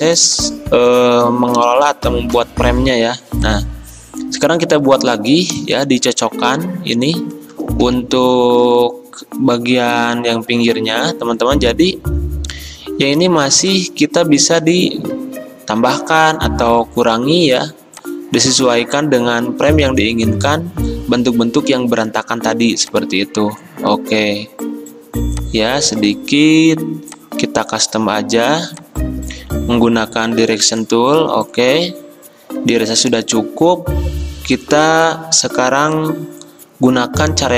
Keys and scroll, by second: 2.4 v, 5.6 a.